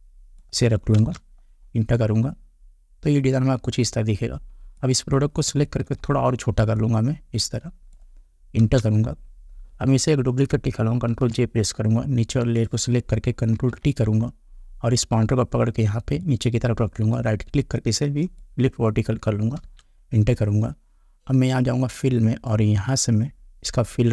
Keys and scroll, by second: 1.0 Return, 5.8 ctrl+t, 8.6 Return, 11.1 ctrl+j, 13.5 ctrl+t, 19.6 Return.